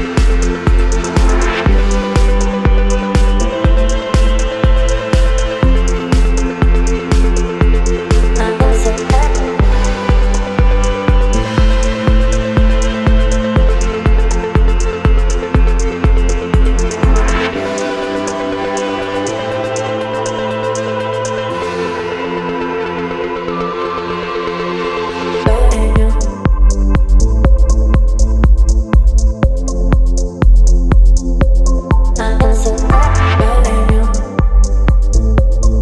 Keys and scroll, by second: 3.2 shift+Return, 5.4 Right, 10.9 Return, 14.6 e, 18.6 v, 19.1 space, 25.9 space, 33.7 Return.